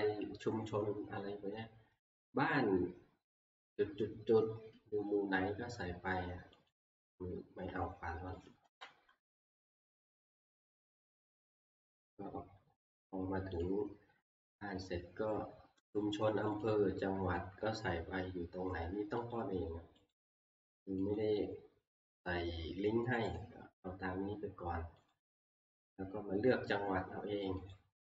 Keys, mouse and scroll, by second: 2.2 click, 6.7 click, 8.5 click, 8.7 Delete, 9.7 click, 9.9-11.3 Left, 13.8 click, 16.6 click, 19.3 click, 20.1 click, 21.2 click, 23.4 click, 25.1 click, 27.7 click.